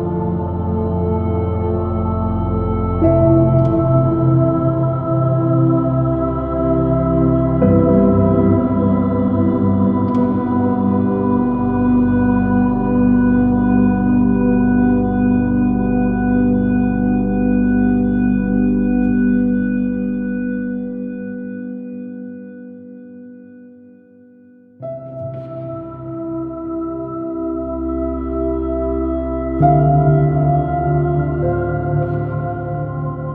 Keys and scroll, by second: 4.7 space, 8.7 super+z, 12.3 alt+super+z, 12.8 x, 13.8 alt+super+z, 15.7 super+-, 17.1 alt+shift+super+i, 17.3 super+space, 18.0 j, 25.2 space, 30.8 space.